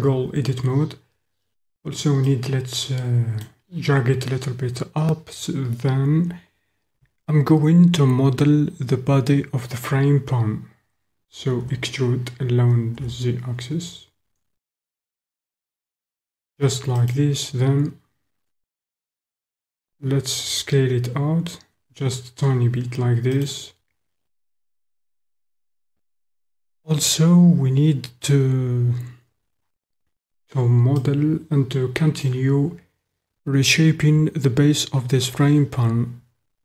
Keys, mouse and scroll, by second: 2.3-3.6 middle drag, 11.7 e, 13.0 z, 17.1 click, 19.8 s, 23.3 click, 31.0-32.2 drag.